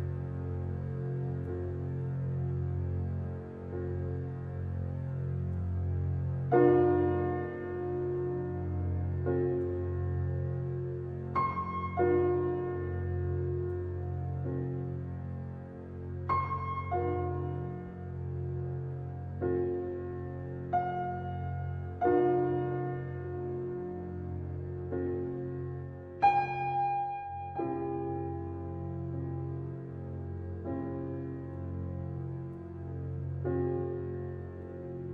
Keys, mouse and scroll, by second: 1.1 Tab, 1.5-2.0 scroll down 2, 2.0-3.2 scroll up 2, 3.2 click, 3.7 scroll down 1, 4.0-4.8 middle drag, 4.8-5.3 scroll down 2, 5.3-6.4 shift+middle drag, 6.4-6.9 scroll down 2, 6.9-7.3 shift+middle drag, 7.3-7.6 scroll down 1, 7.6-10.1 middle drag, 10.1 click, 10.6-11.6 scroll up 3, 11.6 click, 12.4-14.1 middle drag, 14.1 click, 14.5-15.3 middle drag, 15.3 h, 16.0 click, 18.0-20.0 middle drag, 20.0-20.5 scroll down 2, 20.5 shift+a, 22.3-22.9 scroll down 1, 22.9 g, 25.0 s, 27.4 g, 29.9-33.0 middle drag, 33.7 alt+h, 34.6 click.